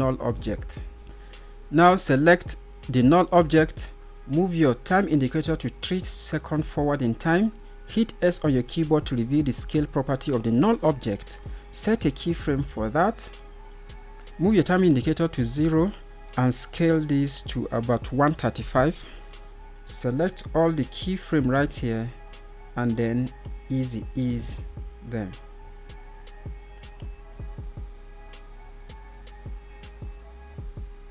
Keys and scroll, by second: 7.8 s.